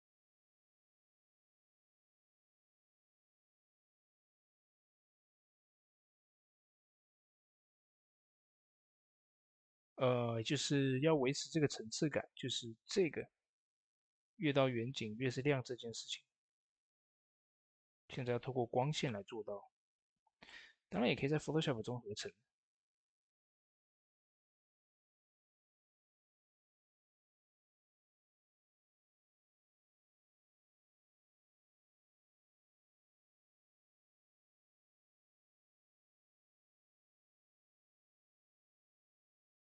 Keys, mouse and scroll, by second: 3.2 click, 3.4 ctrl+s, 7.1-8.6 drag, 8.6 shift+d, 12.9 shift+d, 12.9 click, 14.4-15.2 scroll up 1, 15.2-22.7 drag, 22.6 typing, 23.9-36.8 drag, 23.9 typing, 37.4 middle click, 37.9 scroll up 1, 38.3-39.6 shift+middle drag, 39.1-39.6 middle drag.